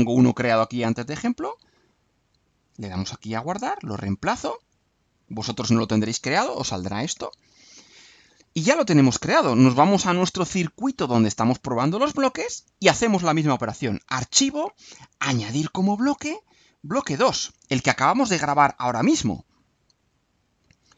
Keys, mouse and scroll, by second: 2.7 click, 4.6 click, 10.7-11.9 drag, 15.3 click, 17.5 click.